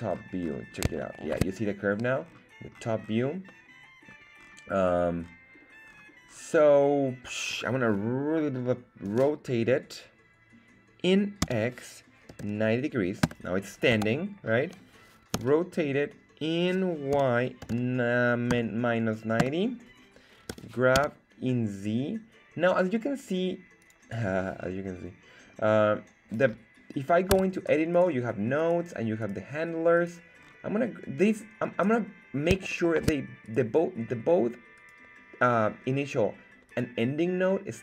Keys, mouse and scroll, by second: 0.9 shift+scroll down 1, 1.4 shift+middle click, 2.2 scroll down 2, 2.8 scroll down 2, 3.5-4.7 middle drag, 3.5 scroll down 2, 4.7 scroll up 2, 4.8-5.7 scroll down 2, 5.7-6.2 scroll up 3, 6.7 scroll up 2, 9.0 r, 11.4 x, 12.3 KP_9, 12.4 KP_0, 13.2 Return, 13.9 KP_1, 15.3 r, 17.1 y, 17.6 KP_9, 17.7 KP_0, 18.5 KP_Subtract, 19.4 Return, 20.5 g, 20.9 z, 23.8 click, 24.2-25.5 scroll up 5, 25.5-26.0 scroll down 2, 26.9-27.4 scroll down 1, 27.4 Tab, 27.9 right click, 28.6 right click, 29.2 right click, 29.9 right click, 30.5 scroll up 2, 31.3 right click, 32.7 shift+middle click, 33.4 right click, 34.7 right click, 36.7 right click.